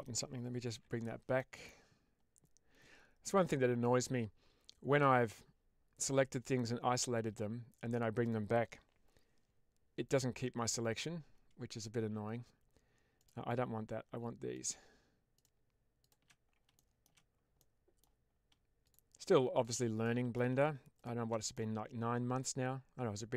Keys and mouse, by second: 1.3 middle click, 14.4 shift+click, 15.2 shift+click, 16.6-17.0 shift+middle drag, 17.5-17.9 middle drag, 19.9-20.3 middle drag, 21.4-23.3 middle drag.